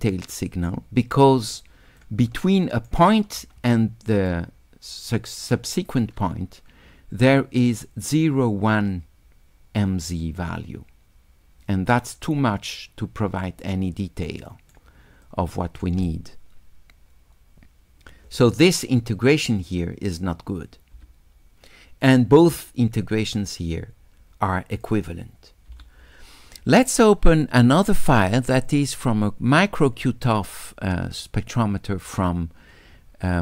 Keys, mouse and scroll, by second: 1.6 click, 2.5 shift+right click, 2.6 shift+click, 4.3-6.0 shift+right drag, 13.6-14.8 right drag, 15.3-15.8 drag, 18.7 click, 24.8 click, 28.0 click, 28.7 click.